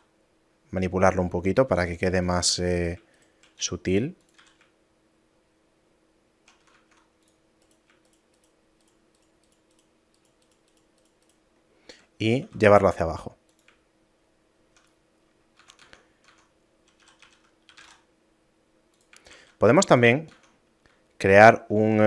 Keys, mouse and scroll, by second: 2.5 a, 2.8 right click, 3.2 shift+right click, 3.6 s, 4.4 a, 4.9 shift+middle click, 6.8 ctrl+Tab, 7.7 right click, 8.1 shift+right click, 11.7 shift+middle click, 12.5 e, 14.0 shift+middle click, 14.9 middle click, 15.3 scroll down 1, 15.7 Tab, 17.1 a, 17.7 g, 19.3 shift+a, 20.3 Tab.